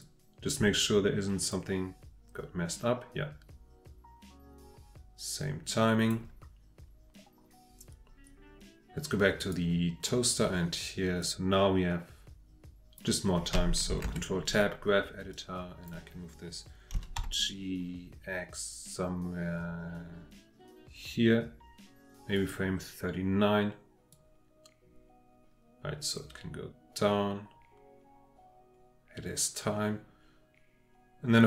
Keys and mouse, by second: 0.0-6.1 drag, 9.4 click, 11.2-13.0 drag, 14.0 ctrl+Tab, 15.3-15.9 drag, 16.9 g, 17.2 x, 22.4 click, 24.1-31.4 drag.